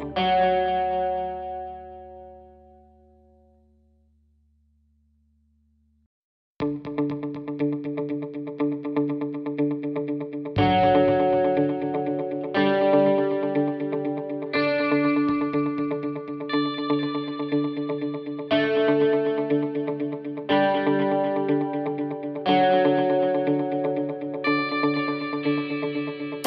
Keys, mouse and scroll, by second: 5.0 click, 5.8 click, 18.5 click, 18.5-21.5 scroll down 6, 23.8 click, 25.5-26.2 scroll up 1, 26.2 middle click, 26.2-26.4 scroll up 1.